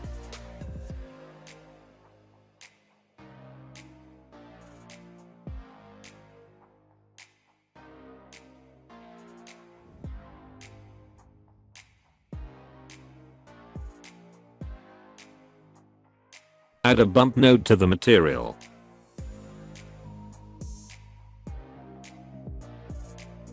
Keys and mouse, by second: 0.4 click, 3.0 click, 3.5 click, 4.0 click, 4.5 click, 6.5 click, 7.0 click, 7.4 click, 7.8 click, 8.3 click, 8.7 click, 11.2 click, 12.6 alt+a, 13.3 middle click, 14.1 middle drag, 15.4 shift+middle click, 15.7 middle click, 16.2 middle click, 17.1 shift+a, 21.7-23.1 drag, 23.1-23.5 middle drag.